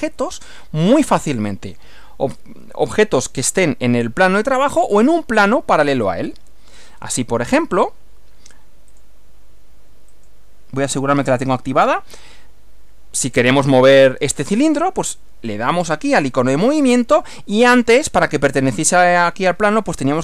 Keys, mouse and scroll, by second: 9.0 click, 10.1 click, 14.0 click, 15.8 click.